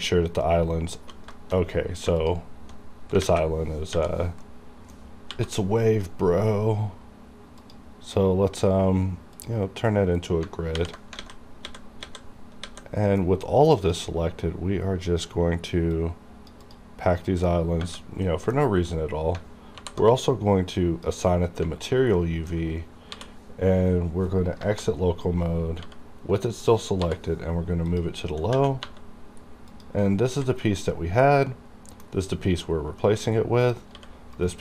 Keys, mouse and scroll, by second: 1.4 shift+middle click, 2.3 alt+click, 3.3 alt+a, 3.9 l, 4.5 middle click, 5.4 n, 7.7 click, 7.7 click, 10.7 h, 11.3 alt+a, 12.1 a, 12.7 a, 12.9 scroll down 2, 13.1 middle click, 13.9-16.0 drag, 16.7 click, 17.3 middle click, 18.3 middle click, 18.3 middle click, 19.0-19.3 scroll down 1, 19.7 alt+m, 20.9 click, 22.2 middle click, 23.1 m, 24.6 KP_Divide, 25.9 g, 26.4 right click, 27.1 m, 27.9 click, 28.6 2, 29.4 scroll down 1, 29.8 click, 30.4 h, 31.0-32.2 middle drag, 32.2 middle click, 33.4 scroll up 1, 33.7 click, 34.0 g, 34.4 right click.